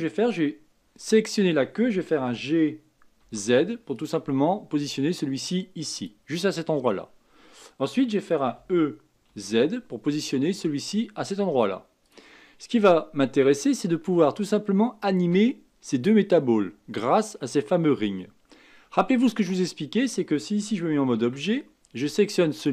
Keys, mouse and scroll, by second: 2.1 g, 8.5 e, 21.2 Tab, 22.5 click.